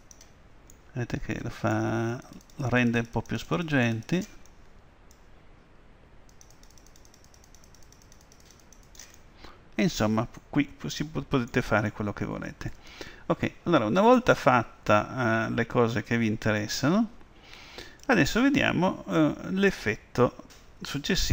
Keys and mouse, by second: 0.8-4.6 middle drag, 2.4-5.9 drag, 5.9 middle click, 6.4-10.8 drag, 10.8 middle click, 13.9-15.4 middle drag.